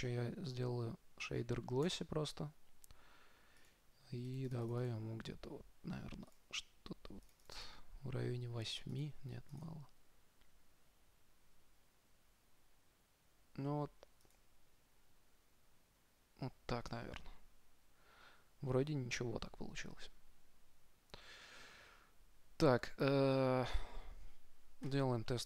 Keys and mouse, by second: 0.2-1.6 drag, 4.2-7.8 drag, 9.0-11.8 drag, 14.7-16.6 drag.